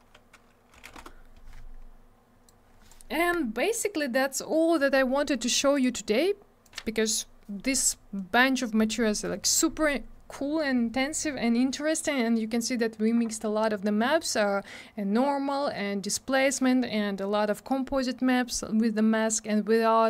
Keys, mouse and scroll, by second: 0.7 3, 0.9 Return, 2.4 click, 5.7 click, 5.8 click, 6.6 click, 6.7 click.